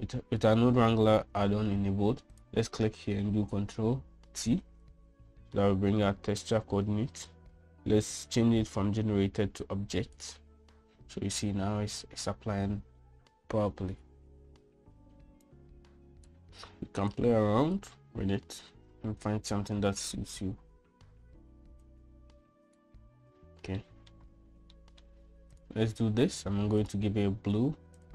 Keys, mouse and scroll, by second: 3.2 click, 5.2 ctrl+t, 6.4 shift+click, 10.5-11.1 drag, 16.5 click, 18.0 click, 22.8 click, 24.7 shift+middle drag, 25.6 middle drag, 27.7-28.1 drag.